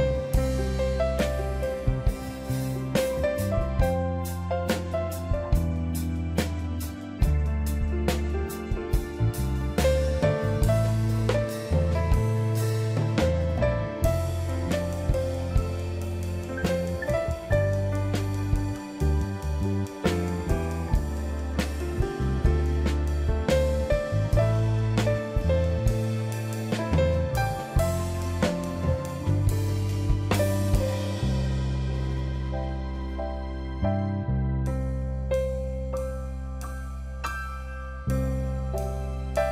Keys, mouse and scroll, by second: 3.1 ctrl+j, 4.4 right click, 7.1 right click, 10.1 ctrl+click, 21.9 ctrl+i, 25.0 ctrl+click, 27.2 ctrl+t, 28.3 alt+click, 34.1 ctrl+j, 35.0 right click, 37.3 right click, 37.7 ctrl+click.